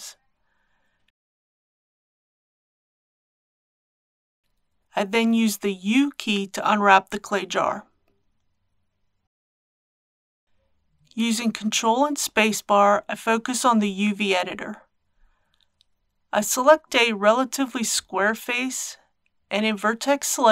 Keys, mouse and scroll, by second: 2.3 click, 3.4 a, 4.6 u, 5.2 click, 13.2 ctrl+space, 14.5 scroll up 1, 16.1 shift+middle click.